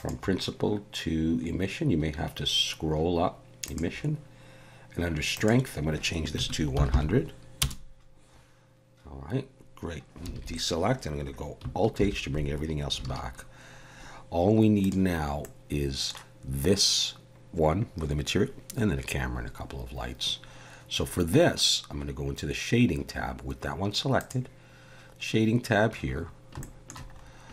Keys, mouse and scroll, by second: 0.0 click, 5.3 click, 6.9 0, 10.3 alt+a, 12.0 alt+h, 13.1 alt+a, 14.8 click, 15.4 middle click.